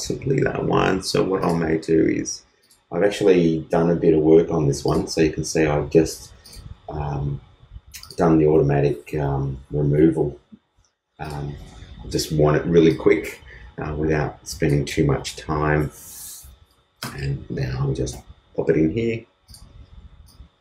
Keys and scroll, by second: 15.2 super+c, 18.1 super+v.